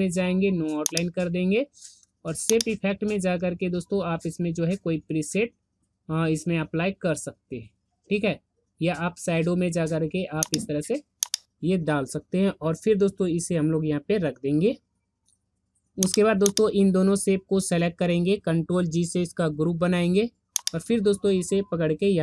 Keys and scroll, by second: 19.2 ctrl+g.